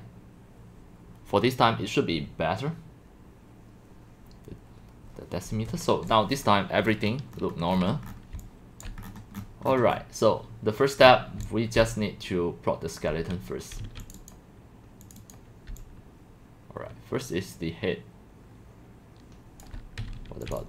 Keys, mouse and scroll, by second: 6.4 click, 6.9-8.1 middle drag, 6.9-8.1 scroll, 8.1 scroll down 10, 8.8 click, 9.1-9.5 scroll down 11, 9.5-9.9 scroll up 16, 9.9-11.4 middle drag, 11.4 scroll down 4, 11.4-13.8 typing, 14.1-15.7 drag, 15.7-19.7 c, 20.1 q, 20.3 q, 20.6 click.